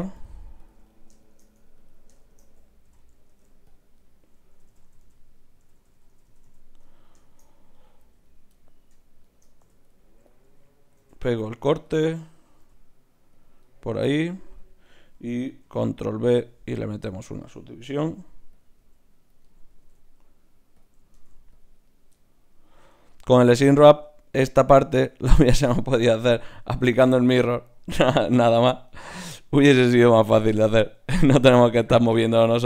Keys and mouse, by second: 2.2-3.3 right drag, 2.8 f, 3.3 ctrl+Tab, 3.7-5.3 drag, 4.5-4.9 f, 5.0-6.3 f, 5.2 right click, 6.7 f, 8.2-11.4 drag, 9.6 f, 11.0 ctrl+r, 12.6 g, 14.4-16.1 drag, 15.6 ctrl+b, 18.1 g, 18.6-21.1 drag, 18.8 s, 19.7 s, 21.1 ctrl+Tab, 22.1 click, 22.3-23.7 middle drag, 22.4 click, 22.4 right click, 22.8 g, 23.4 click, 23.4 right click, 23.9 g, 24.8 g, 26.7 g, 27.8 g, 29.1 g, 30.8 g, 31.6 g, 31.9-32.6 drag.